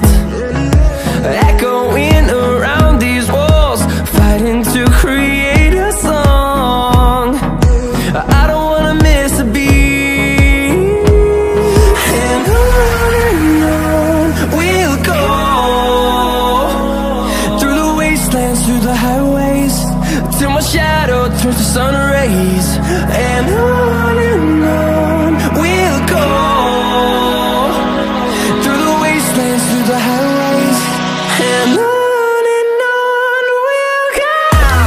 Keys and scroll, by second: 17.9 ctrl+e.